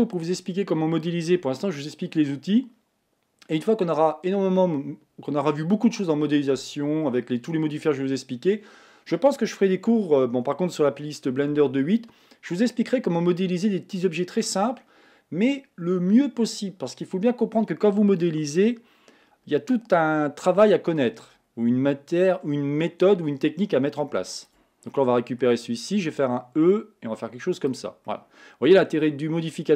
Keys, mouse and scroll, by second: 24.4 shift+click, 24.9-26.1 middle drag, 26.1 e, 28.1-29.1 middle drag, 29.1-29.5 scroll down 2, 29.5-29.7 middle drag.